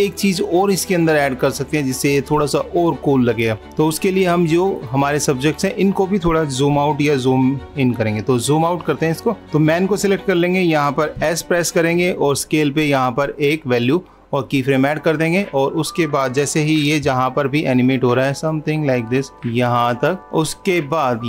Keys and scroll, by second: 17.5 super+=.